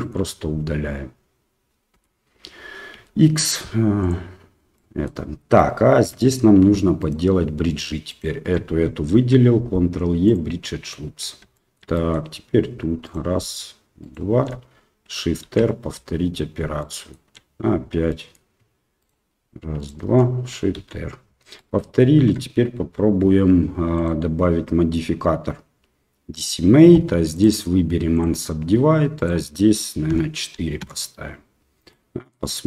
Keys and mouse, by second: 2.0 l, 2.9 x, 4.7 middle click, 6.0 2, 8.1 alt+shift+right click, 9.1 ctrl+e, 11.6 middle click, 12.0 middle click, 14.1 alt+shift+right click, 15.7 shift+r, 16.8 shift+middle click, 18.1 middle click, 21.0 shift+r, 21.6 middle click, 22.4 Tab, 24.0-26.5 drag, 27.4 click, 29.1-31.5 drag, 31.9-32.3 middle drag.